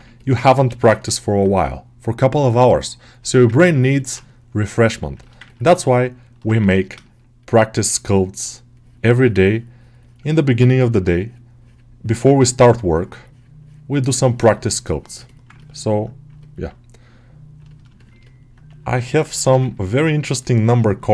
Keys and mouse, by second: 0.0 middle click, 0.9 ctrl+middle click, 1.1 middle click, 3.2 alt+middle click, 3.5 ctrl+alt+middle click, 3.8 middle click, 4.7 shift+click, 5.1 alt+shift+middle click, 5.3 ctrl+middle click, 5.6 alt+middle click, 6.9-7.9 ctrl+drag, 7.9 middle click, 8.3-10.9 middle drag, 11.5-15.2 middle drag, 15.5 ctrl+middle click, 16.3 middle click, 17.6 middle click, 17.8 shift+middle click, 18.1 alt+middle click, 19.3 middle click, 20.7 alt+shift+middle click.